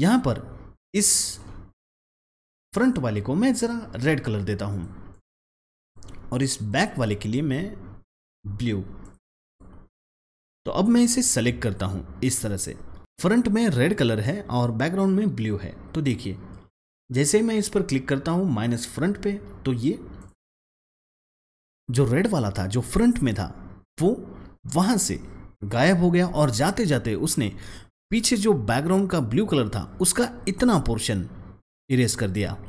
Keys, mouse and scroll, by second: 1.2 double click, 2.6 click, 6.8 double click, 8.1-13.0 drag, 20.1 click.